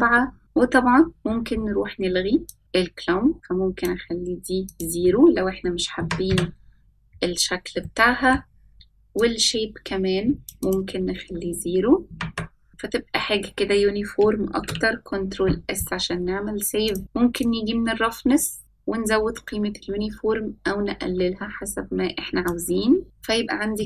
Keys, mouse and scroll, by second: 0.4 middle click, 1.1 click, 2.3-2.9 scroll down 4, 2.6-5.2 drag, 6.1-7.6 drag, 9.1 middle click, 10.5-13.3 drag, 16.4 ctrl+s, 17.5 click, 18.6-23.0 drag, 23.0 scroll down 2, 23.4-23.8 middle drag.